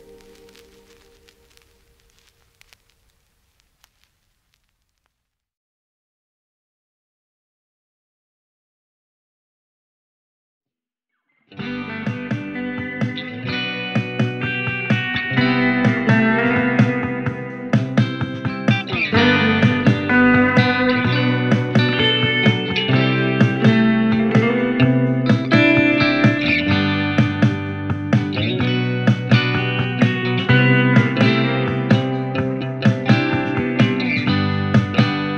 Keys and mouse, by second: 13.7 f, 14.1 middle click, 14.2-35.3 drag, 25.1 ctrl+z, 27.5 g.